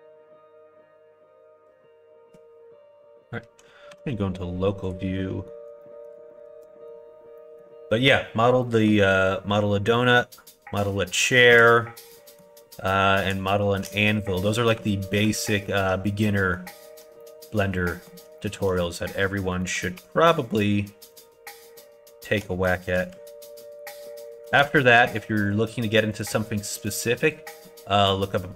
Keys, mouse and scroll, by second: 3.9 /, 4.8 click, 5.1 middle click, 5.8 shift+middle click, 6.4 alt+z, 6.6 middle click, 7.3 middle click, 8.6 middle click, 9.9 middle click, 11.3 shift+middle click, 12.1 middle click, 14.7 2, 16.2 middle click, 17.2 middle click, 17.8 middle click, 18.3 shift+middle click, 19.6 middle click, 19.9 3, 20.4 click, 21.1 click, 22.4 middle click, 23.7 ctrl+click, 24.3 shift+click, 26.1 shift+click, 26.8 shift+click, 27.2 shift+click, 27.6 middle click.